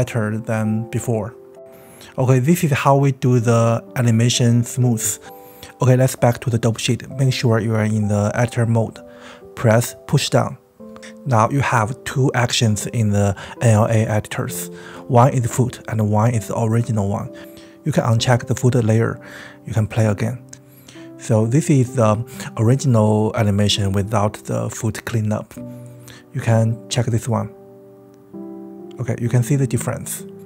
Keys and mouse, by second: 3.7 middle click, 4.6 space, 5.6-6.6 drag, 9.0 click, 10.7 click, 11.5 click, 12.1 KP_1, 13.5 shift+middle click, 15.0 click, 17.1 click, 18.4-20.0 drag, 20.2 space, 28.2 click.